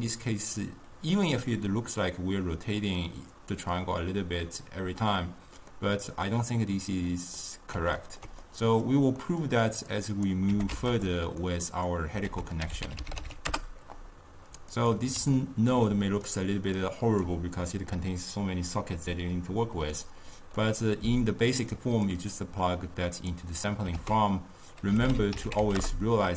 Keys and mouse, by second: 1.2-4.3 middle drag, 5.8-10.0 middle drag, 10.0-10.6 drag, 10.6 g, 11.5 middle click, 12.4 ctrl+a, 15.5-16.9 ctrl+middle drag, 16.9-19.9 drag, 20.0-22.1 middle drag, 22.1-24.1 drag, 24.1 ctrl+a.